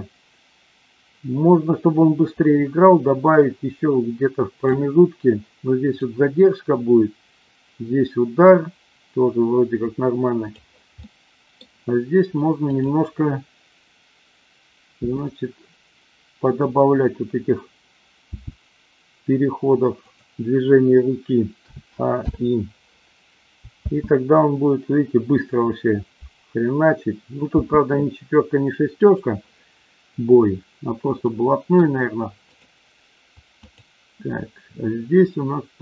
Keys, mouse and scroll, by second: 6.0-10.5 drag, 11.1-11.5 middle drag, 14.9 r, 18.2 g, 20.0 click, 21.6 a, 22.2 i, 23.8 space, 27.5 space, 29.0 click, 31.3 middle click, 32.4 click, 33.7-34.3 drag.